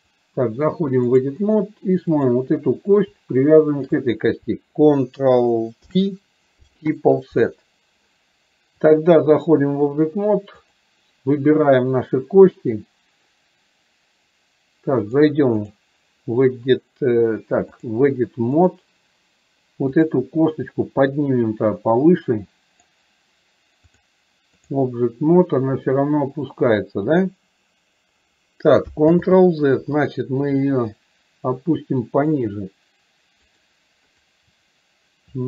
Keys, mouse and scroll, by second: 0.1-1.5 drag, 2.2 click, 3.8 shift+click, 9.0 click, 15.3 click, 17.8-18.8 drag, 21.2-23.0 drag, 24.0-25.0 drag, 29.3 ctrl+z, 31.1-32.5 drag, 33.6 click.